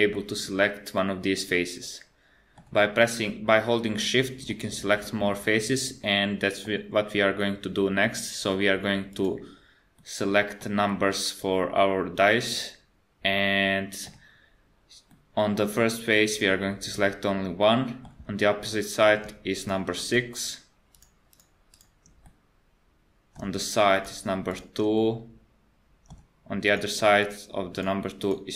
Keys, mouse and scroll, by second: 0.1 middle click, 1.2 middle click, 3.1 middle click, 4.5 middle click, 7.4 middle click, 9.1 click, 9.9 middle click, 10.9 middle click, 15.1 middle click, 17.6 middle click, 18.3-18.9 scroll up 2, 18.7 middle click, 19.6 shift+click, 20.1 shift+click, 20.5 shift+click, 21.0 shift+click, 21.3 shift+click, 21.7 shift+click, 22.3 middle click, 24.0 shift+click, 24.5 shift+click, 25.0 middle click, 26.7 shift+click, 27.2 shift+click, 27.8 shift+click, 28.2 shift+click.